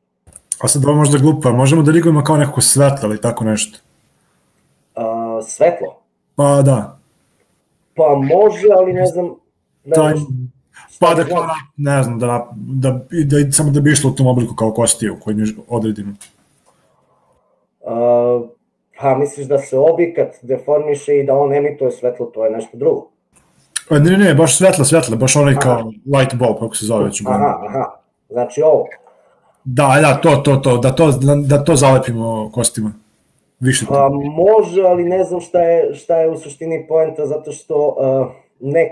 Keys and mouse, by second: 28.3 click, 28.9 click, 29.9 click.